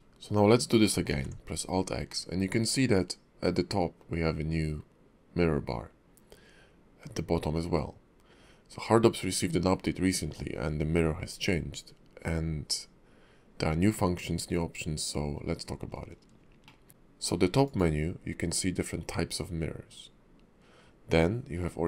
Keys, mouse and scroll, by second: 1.1 alt+x, 16.6 shift+middle click, 16.9 click, 17.6 click.